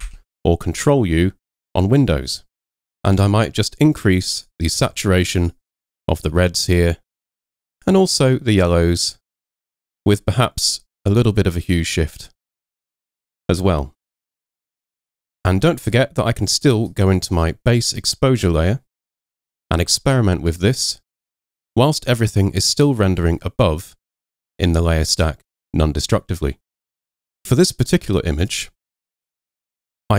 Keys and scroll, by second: 0.1 super+u.